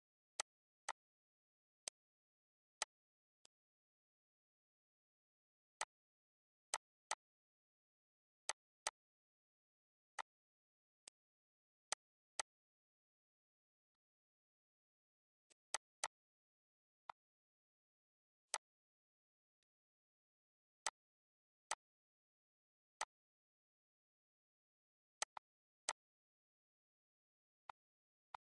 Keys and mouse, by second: 0.3 click, 1.7 click, 2.7 click, 3.3 click, 4.5 ctrl+s, 4.9 z, 5.6 click, 6.6 click, 8.4 click, 10.1 click, 11.0 click, 11.8 click, 13.9 click, 15.4 click, 17.0 click, 18.4 click, 19.5 click, 20.8 click, 21.7 click, 23.0 click, 25.1 click, 27.0 ctrl+d, 28.2 click.